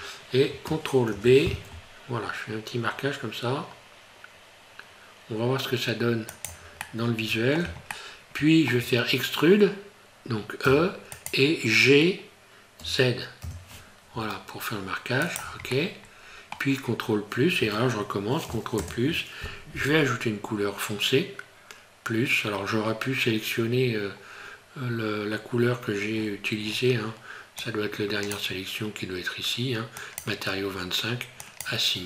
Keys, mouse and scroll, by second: 1.1 ctrl+b, 6.8 middle click, 7.9 shift+middle click, 10.7 e, 12.8 g, 15.8 middle click, 16.8 scroll up 3, 18.8 ctrl+KP_Add, 23.3 scroll down 3, 23.5 scroll up 2, 26.1-26.8 scroll down 9, 27.6 click, 30.0 click.